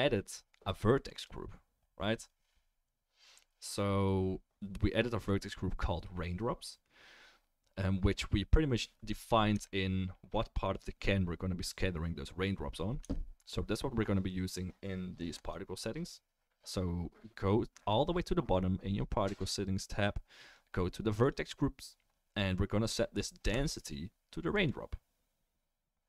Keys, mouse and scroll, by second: 1.3-15.4 right drag, 9.5 Tab, 13.0 Tab, 15.4 middle click, 15.5-21.3 right drag, 21.3-26.0 middle drag.